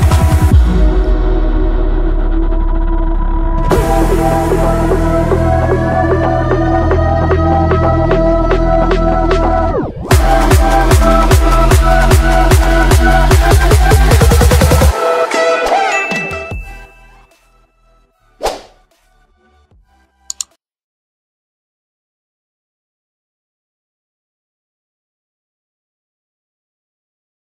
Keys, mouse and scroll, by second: 0.7 click, 2.1 Return, 2.7-3.4 scroll down 1, 3.7 F2, 4.1-5.2 drag, 6.2 F9.